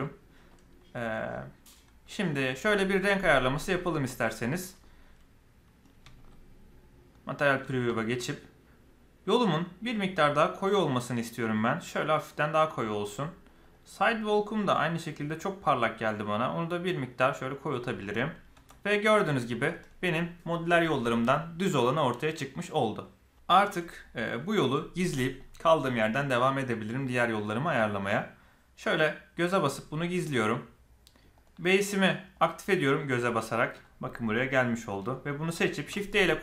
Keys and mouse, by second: 2.0 middle click, 3.8 click, 4.7-5.8 middle drag, 7.1 middle click, 9.4 drag, 13.5 click, 14.7 click, 18.0-18.3 middle drag, 18.5 Tab, 18.9-19.5 middle drag, 19.8 middle click, 29.5 drag, 32.3 click, 33.6 middle click, 34.4 click, 35.8 shift+d.